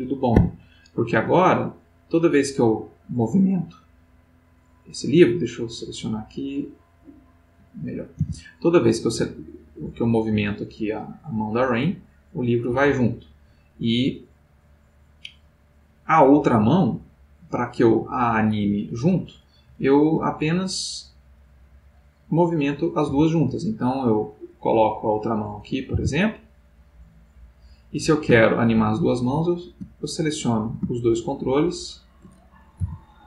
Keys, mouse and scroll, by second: 0.3 Escape, 1.7 click, 2.9 click, 4.4 click, 5.1 click, 6.4 click, 7.3 click, 8.1 g, 16.8 Escape, 18.5-19.7 middle drag, 20.5 click, 22.2 click, 23.0 g, 25.3 click, 25.9 r, 27.7 click, 28.9 shift+click, 29.9 shift+click, 31.4 shift+click, 32.8 g.